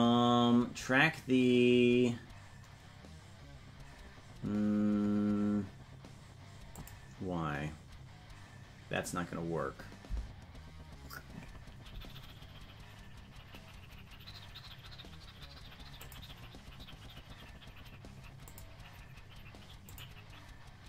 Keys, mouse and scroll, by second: 6.7 click, 16.0 click, 18.4 click, 19.8 click.